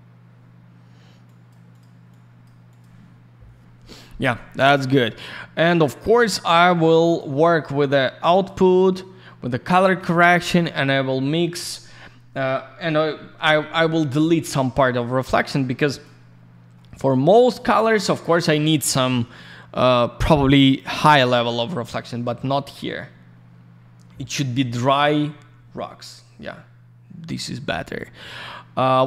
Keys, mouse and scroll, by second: 1.2 click, 1.7 click, 1.8 click, 2.1 click, 2.7 click, 2.8 click, 6.0 middle click, 6.7 click, 7.8 click, 11.4 middle click, 12.2-12.7 scroll up 1, 12.7-13.6 scroll down 1, 14.8 middle click, 15.0 middle click, 15.2 click, 15.8 click, 16.7 middle click, 17.4 scroll up 1, 17.8 click, 17.8 click, 17.9 click, 18.0 double click, 20.9 click, 23.6 scroll up 1, 24.8 scroll down 1, 25.7-26.3 scroll up 1, 26.3 scroll down 1, 28.2 middle click, 28.7 scroll down 1.